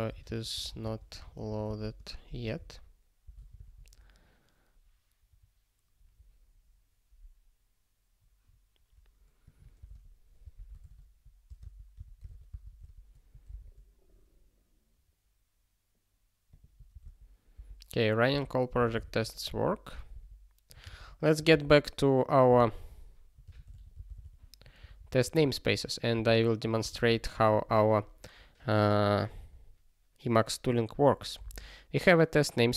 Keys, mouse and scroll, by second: 0.0-2.9 typing, 3.6 ctrl+s, 4.8 scroll down 1, 8.2 scroll down 1, 9.4 click, 9.8 ctrl+space, 9.8 ctrl+p, 10.4 ctrl+n, 10.5 ctrl+a, 10.8 alt+;, 11.4 ctrl+space, 11.6 ctrl+n, 11.9 ctrl+w, 12.3 ctrl+s, 12.5 Return, 12.8 ctrl+s, 16.5 click, 16.9 ctrl+space, 17.1 ctrl+a, 17.6 ctrl+k, 18.3 ctrl+k, 19.0 ctrl+s, 20.1 super+o, 21.0 ctrl+s, 21.5 super+b, 23.4 ctrl+g, 31.4 ctrl+k.